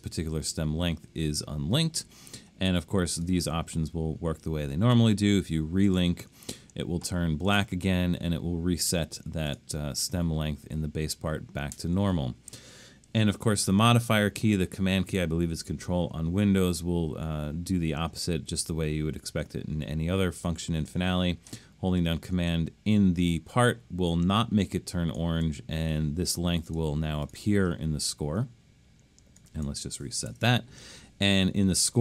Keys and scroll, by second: 30.3 BackSpace.